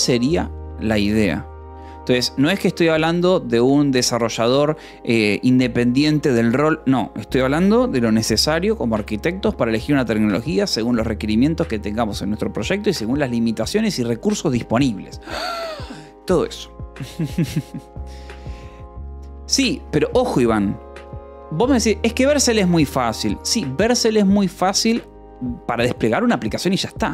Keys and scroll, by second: 19.5 k, 19.8 j, 20.6 k.